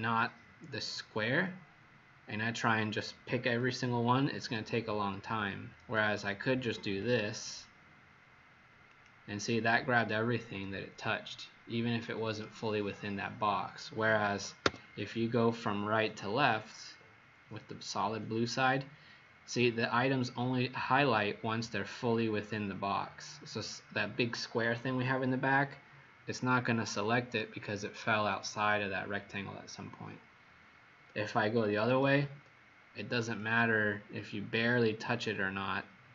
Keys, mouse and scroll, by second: 6.8 click, 14.7 Escape, 16.3 click, 31.9 Escape, 32.2 Escape, 33.4 click.